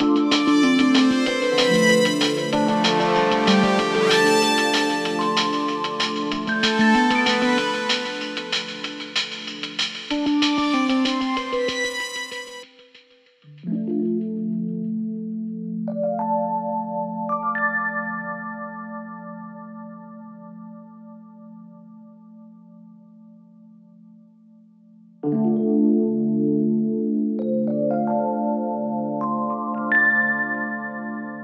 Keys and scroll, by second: 12.5 ctrl+d, 12.9 Escape.